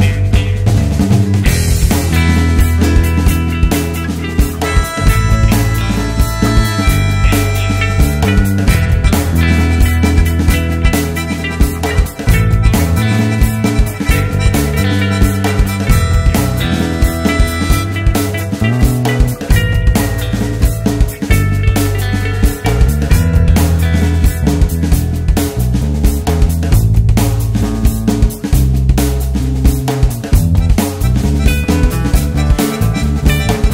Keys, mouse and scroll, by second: 0.0 x, 0.2 `, 0.6 click, 0.9 x, 1.2 1, 1.6 alt+click, 2.7 x, 3.0 alt+click, 3.4 x, 3.6 scroll down 1, 3.8 `, 4.6 scroll down 1, 4.9 `, 5.4-5.7 scroll up 2, 5.7 `, 6.4-6.7 scroll down 2, 6.7 `, 7.0 scroll down 2, 7.4 `, 7.7 scroll up 2, 7.9 scroll down 2, 8.8 scroll up 2, 9.1 `, 10.1 Tab, 10.6 scroll down 2, 10.7 `, 12.6-18.6 drag, 14.0 `, 14.4 scroll up 2, 18.6-19.6 right drag, 19.6-28.0 drag, 24.2 `, 28.4-29.4 scroll down 2, 29.4 click, 31.4 `, 31.6-32.1 scroll up 2, 32.1-33.7 scroll down 2.